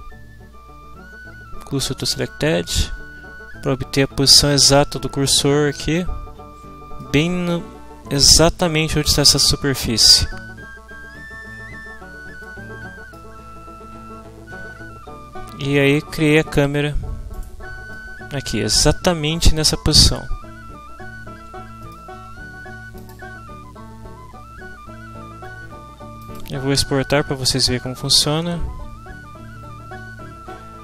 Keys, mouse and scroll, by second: 2.0 click, 2.7-7.4 middle drag, 11.8 Tab, 12.4 middle click, 17.4 right click, 17.9 middle click, 21.8 ctrl+middle click, 23.0 click.